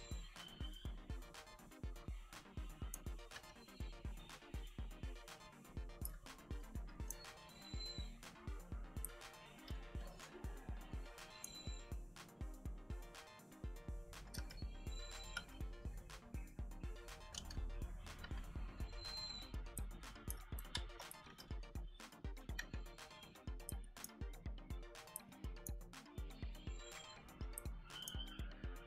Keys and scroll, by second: 3.2 b, 5.9 space, 8.9 space, 14.3 z, 15.2 z, 17.2 g, 18.1 b, 19.7 space, 20.5 space, 21.2 e, 22.5 b, 23.6 space, 25.0 space, 27.3 a, 27.5 space.